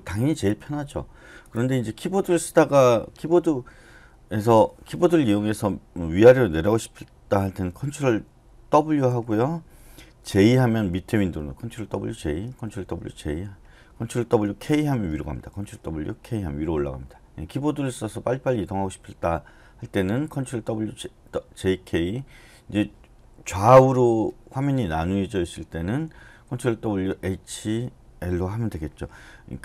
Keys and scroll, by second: 8.9 ctrl+w, 10.3 j, 11.5 ctrl+w, 12.0 j, 12.7 ctrl+w, 13.1 j, 14.2 ctrl+w, 14.7 k, 15.5 ctrl+w, 16.2 k.